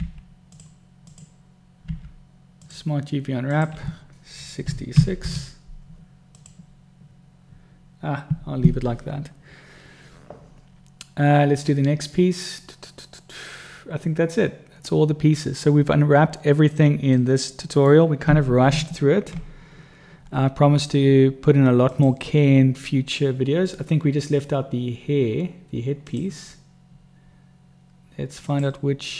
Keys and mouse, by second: 0.3 u, 2.2 u, 5.3 6, 17.5-18.2 middle drag, 19.1 Tab, 22.1 click, 28.8 click.